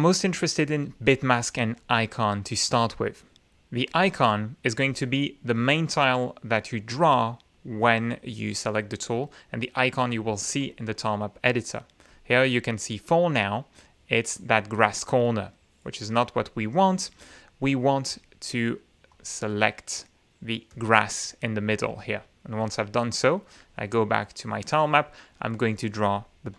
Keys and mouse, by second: 1.3 click, 2.2 click, 4.3 click, 11.0 click, 12.5 click, 14.8-15.5 drag, 15.7 right click, 16.7 click, 17.7 click, 18.5 click, 19.5 click, 21.1 click, 23.0 click, 24.0-25.7 drag.